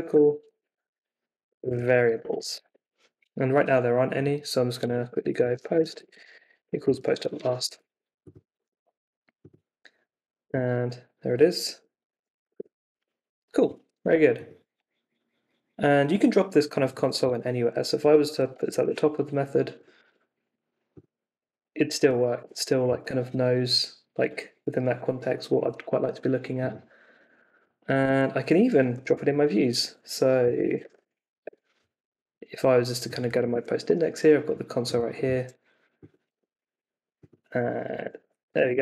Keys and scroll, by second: 0.0-3.0 typing, 4.8 Escape, 4.9-7.7 typing, 8.5 super+r, 9.8 Up, 10.4 Return, 11.7-12.9 typing, 17.2 Escape, 17.7 d, 18.1 Up, 18.5 shift+p, 18.8 super+s, 20.0 super+r, 21.9 Up, 22.4 Return, 27.4 d, 28.0 super+s, 28.9 super+t, 29.1 ,, 30.3-31.5 typing, 33.2 x, 33.5 super+s, 36.3 super+r, 37.6-38.8 typing.